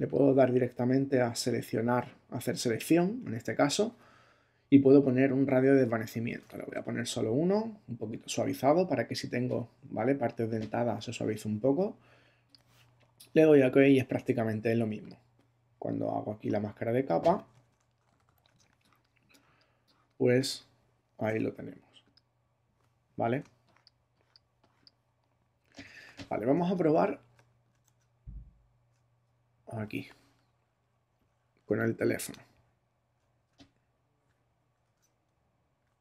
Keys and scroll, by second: 18.5 super+space, 23.4 space, 26.6 super+Tab, 27.8 super+Tab, 32.2 super+Tab, 34.8 Tab.